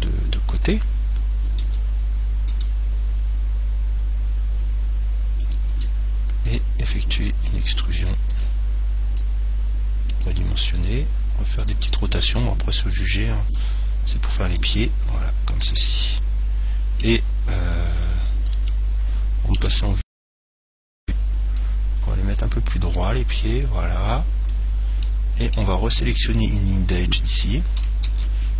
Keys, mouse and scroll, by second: 1.9 r, 2.7 r, 5.8 click, 6.0 e, 8.7 click, 10.9 r, 12.0 click, 14.9-16.8 middle drag, 18.9 KP_1, 19.9 KP_3, 21.8 click, 25.3-28.5 middle drag, 28.3 ctrl+Tab.